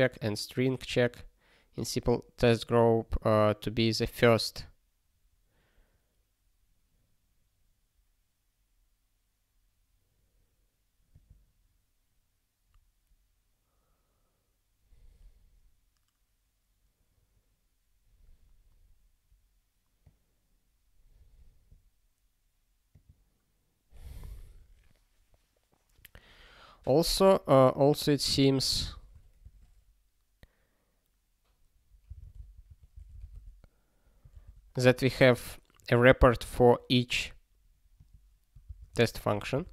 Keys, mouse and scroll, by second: 27.9 click, 28.8 Return, 29.4 (, 32.7-33.6 typing, 34.8 ctrl+g, 38.1 click, 38.6 ctrl+b, 39.0 alt+shift+s, 39.6 ctrl+s.